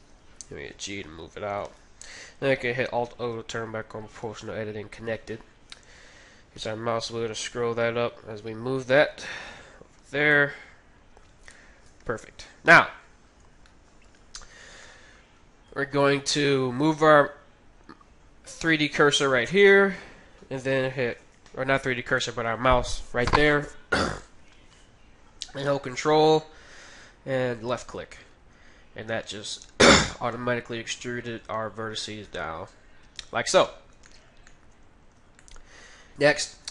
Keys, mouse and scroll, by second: 0.3 g, 3.1 alt+o, 4.2 g, 10.3-12.2 middle drag, 11.8 KP_3, 12.9-13.7 scroll down 1, 13.7-16.7 middle drag, 27.6-29.5 drag, 32.1 r, 34.1-36.5 middle drag.